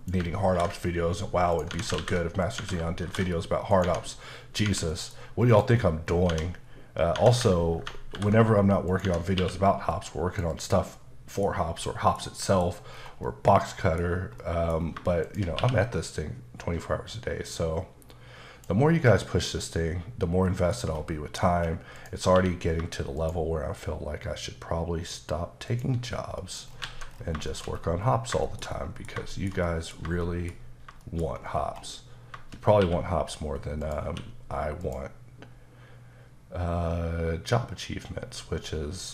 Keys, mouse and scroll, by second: 0.0 click, 0.5 ctrl+b, 1.7 Tab, 2.0 ctrl+a, 2.6 Tab, 3.1 ctrl+b, 3.7 click, 3.8 Tab, 4.1 middle click, 4.7 Tab, 4.9 middle click, 5.2-5.5 scroll up 1, 5.5 click, 6.1 scroll up 2, 6.3 Tab, 6.7-7.2 scroll down 2, 7.2 Tab, 8.2 ctrl+b, 8.9 click, 9.1 Tab, 9.4 q, 9.9 click, 10.6 double click, 11.0 middle click, 11.6 scroll down 2, 11.8 middle click, 12.2-13.3 scroll down 6, 12.5 middle click, 14.1 scroll down 2, 14.4 middle click, 14.8 scroll up 2, 15.3 shift+click, 15.6 q, 17.5 click, 19.2 middle click, 19.6-20.5 scroll up 2, 20.5 middle click, 20.9-21.5 scroll up 2, 21.5-22.0 scroll up 2, 22.0 click, 22.4 q, 23.2 shift+click, 25.7 shift+double click, 26.1-28.4 scroll down 10, 26.4 middle click, 26.9 alt+a, 27.5 shift+middle click, 28.5 shift+middle click, 29.3 shift+middle click, 30.2 shift+middle click, 31.0 shift+double middle click, 31.3-32.3 scroll up 3, 32.8 q, 33.9 click, 34.1 q, 36.1-36.7 scroll down 2, 36.7-37.7 scroll down 2, 37.8-38.4 scroll down 1, 38.4-39.1 scroll down 4.